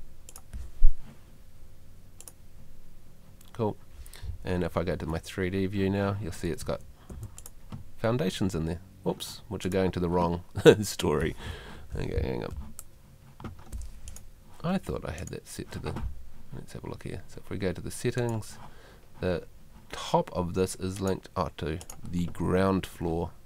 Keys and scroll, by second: 4.9 F3, 6.6 Escape, 12.5 F2.